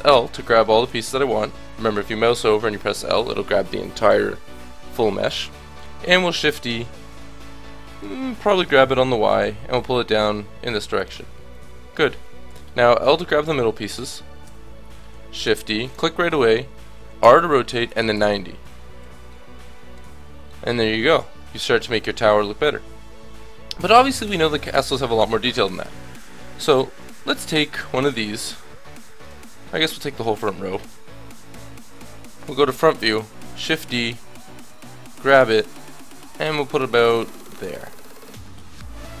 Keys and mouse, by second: 6.1 shift+d, 11.5-13.4 drag, 12.5 l, 12.9 l, 13.9 l, 14.4 l, 15.4 shift+d, 17.2 r, 19.0 a, 20.0 Tab, 24.0-26.4 middle drag, 24.5 Tab, 25.8 KP_7, 26.7 a, 27.0 a, 28.2 l, 29.5 middle click, 30.8-33.4 typing, 31.5-33.4 middle drag, 33.7-36.6 drag, 38.7-39.2 middle drag.